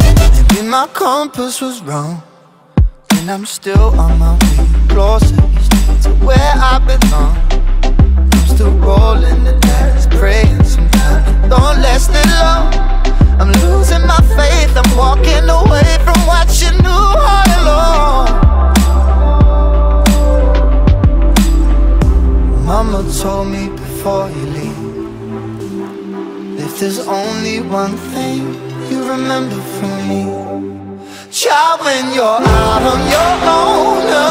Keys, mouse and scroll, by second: 0.2-3.1 typing, 5.4 shift+d, 5.7 shift+d, 7.4-8.8 drag, 9.1 shift+d, 10.0 scroll down 2, 10.2-10.7 alt+middle drag, 10.7 r, 11.6 click, 12.7 alt+click, 14.3 click, 14.4 click, 14.8 click, 15.0 click, 15.9 Delete, 17.2 click, 17.4 click, 17.9 click, 19.9 ctrl+s, 21.3 click, 22.1 click, 24.4 scroll down 9, 24.4-28.5 drag, 29.6 shift+a, 29.8 scroll down 3, 30.1-31.1 alt+drag, 31.1 s, 31.7 click, 32.7 click, 33.1 click.